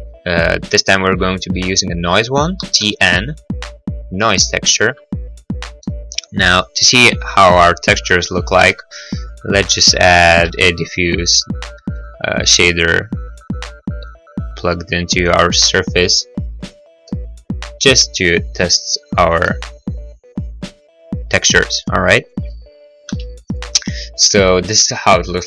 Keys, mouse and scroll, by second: 2.6 t, 2.8 n, 4.5 click, 4.9 middle click, 5.0 middle click, 5.7-6.2 scroll, 5.9 middle click, 8.4 click, 8.7 g, 8.9 x, 9.1 click, 9.4 click, 9.9 x, 10.4 shift+a, 10.4 h, 10.6 d, 11.4 click, 12.2 click, 13.7 click, 15.5 click, 16.7 click, 17.1 middle click, 17.5 middle click, 19.4 click, 19.5 middle click, 19.9 middle click, 19.9-20.5 scroll, 22.4 click, 23.2 n.